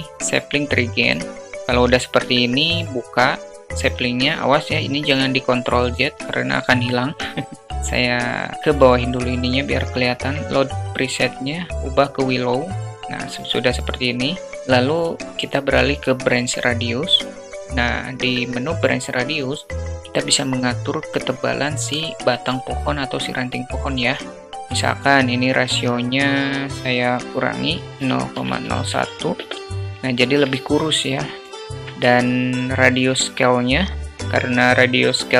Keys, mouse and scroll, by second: 7.7 click, 10.0-11.8 drag, 14.4-15.6 drag, 22.0 shift+middle click, 25.9-29.2 drag, 29.8-30.4 alt+middle drag, 30.7 shift+middle click.